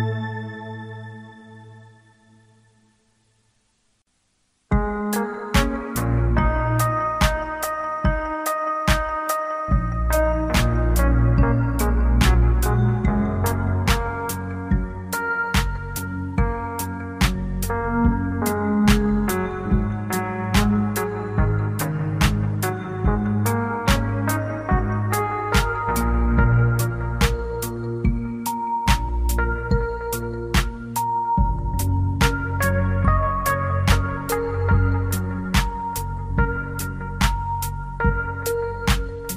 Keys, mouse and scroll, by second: 0.6 click, 1.4 g, 2.8 click, 10.8 click, 15.2 click, 18.1 middle click, 21.6 scroll up 2, 26.3 click, 32.4 click.